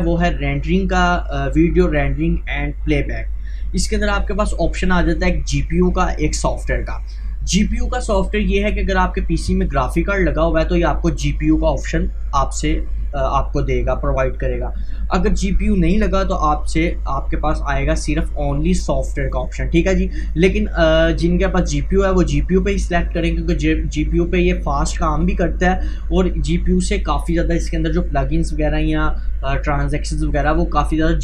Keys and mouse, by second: 4.0 click, 19.1 click.